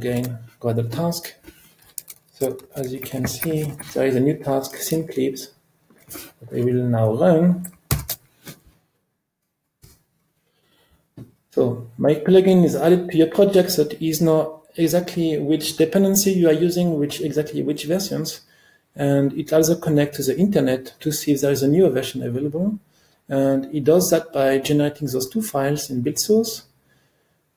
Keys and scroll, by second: 0.1 ctrl+r, 8.0 ctrl+alt+r.